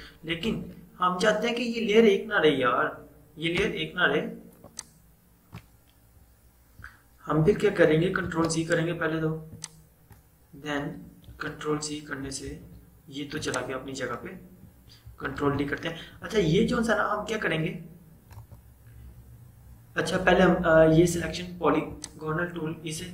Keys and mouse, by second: 0.5 ctrl+z, 3.6 space, 4.7 click, 4.8 space, 6.4-7.7 typing, 8.3 ctrl+z, 9.6-11.4 drag, 11.4 ctrl+z, 13.5-14.8 drag, 15.5 ctrl+d, 18.5 right click, 22.0 click.